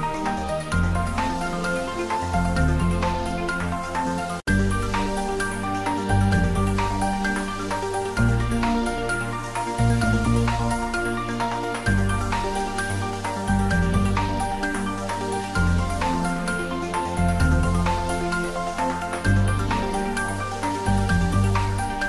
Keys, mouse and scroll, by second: 1.0-6.0 drag, 7.4-11.9 drag, 11.9-12.5 scroll down 1, 13.2-15.3 middle drag, 15.3 click, 16.5 click, 17.7 scroll down 1, 18.6-20.2 middle drag, 20.2 click, 21.8 click.